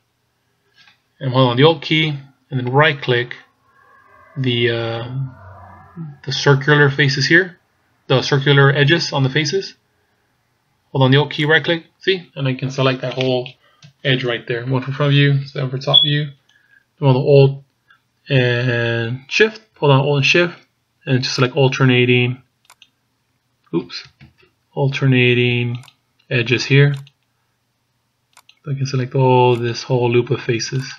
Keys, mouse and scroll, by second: 0.2 scroll up 3, 11.5 alt+right click, 13.8 KP_1, 15.4 KP_7, 21.4 alt+shift+right click, 24.5 ctrl+z, 25.8 alt+shift+right click.